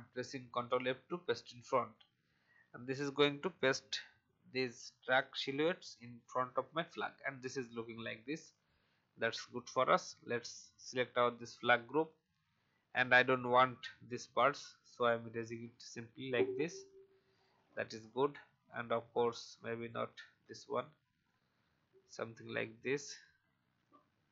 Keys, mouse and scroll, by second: 0.6 ctrl+f, 2.8-3.2 alt+scroll up 1, 3.5 click, 9.5-10.6 scroll down 1, 10.6 click, 14.2 shift+e, 15.0 alt+click, 17.0 alt+v, 17.3 click, 18.0-18.4 scroll up 1, 18.6-18.9 alt+scroll up 1, 19.8 click, 20.3 shift+e, 21.3 alt+click, 23.8-24.3 alt+drag.